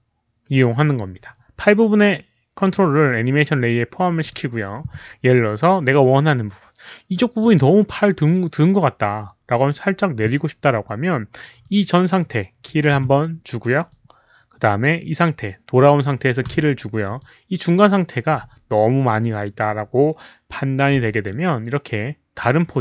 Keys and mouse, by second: 2.6 click, 4.2 click, 5.3-7.3 drag, 11.6 click, 12.9 s, 13.8-15.8 drag, 15.0 s, 16.1 s, 17.1-18.3 drag, 20.6-22.8 typing, 20.9 click, 21.2-22.8 middle drag, 22.5 click.